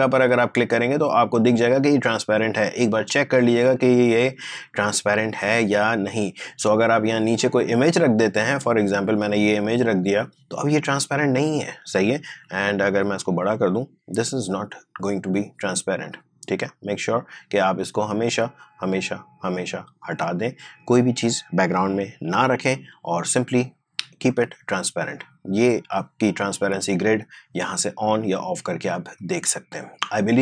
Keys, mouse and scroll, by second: 2.9-8.6 drag, 8.6-11.9 drag, 12.3 s, 13.1-16.0 drag, 22.3 Delete, 24.3 click, 27.7 click.